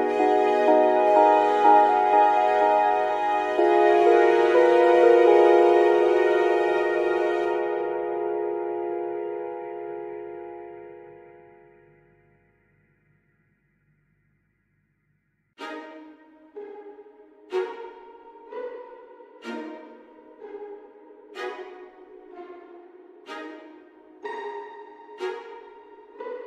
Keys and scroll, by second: 15.9 F9, 21.3-22.2 typing, 24.1 ., 24.3 1, 24.6 Return.